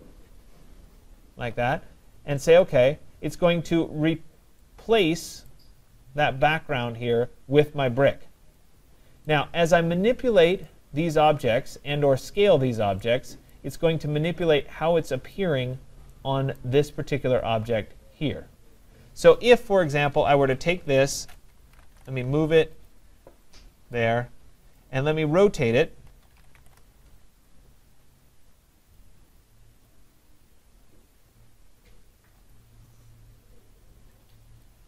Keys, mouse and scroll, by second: 2.7 click, 5.5 right click, 6.0 middle click, 6.0 middle click, 6.2 middle click, 6.2-7.2 scroll, 7.2-7.7 scroll, 9.3 right click, 10.7 click, 13.6 right click, 14.0 middle click, 14.0 middle click, 14.2 middle click, 15.4 right click, 15.8 middle click, 15.8 middle click, 15.9 middle click, 16.6 right click, 16.9 middle click, 16.9 middle click, 17.0 middle click, 17.4 middle click, 17.4 middle click, 18.8 middle click, 18.9 middle click, 21.4-22.4 typing, 21.6 scroll, 22.9 click, 23.6 click, 24.8 right click, 25.9-27.1 typing, 29.0 click, 29.9 click, 32.5 click, 34.6 click.